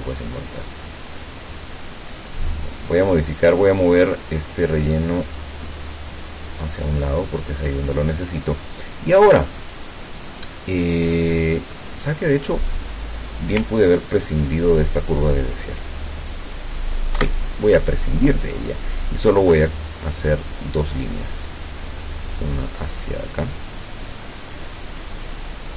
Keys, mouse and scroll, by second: 1.5 click, 2.2 click, 2.5 click, 3.9-6.0 drag, 7.6 click, 9.3 click, 17.2 Delete, 18.7 click, 22.3 click.